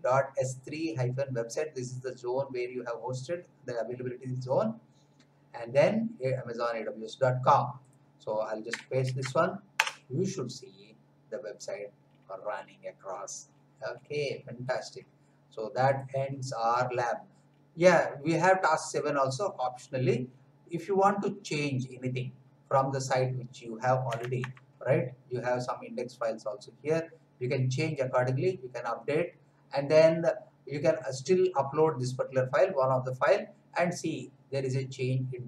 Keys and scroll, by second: 9.0 ctrl+v, 9.7 Return, 24.4 alt+Tab.